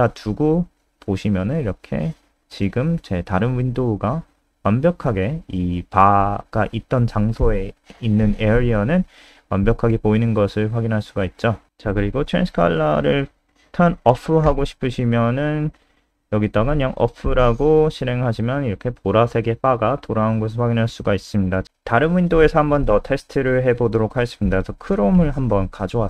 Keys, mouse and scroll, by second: 5.0 click, 6.1 click, 7.4 alt+F4, 7.9 click, 9.5 ctrl+Right, 9.7 ctrl+Right, 10.6 ctrl+Right, 11.7 Down, 11.9 Down, 12.2 Up, 12.4 Up, 12.5 Up, 12.8 Down, 14.8 ctrl+Left, 15.3 Left, 15.8-16.9 typing, 17.0 F5, 19.0 click, 19.9 super+Up, 21.6 click, 24.0 ctrl+c, 24.9 click, 25.6 F3.